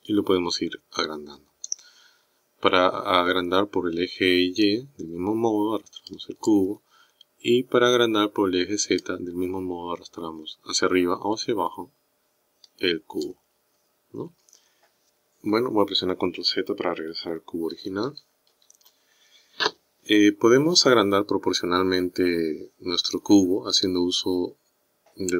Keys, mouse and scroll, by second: 4.7 click, 9.0 click, 17.8 ctrl+z, 18.1 ctrl+z, 18.6 ctrl+z.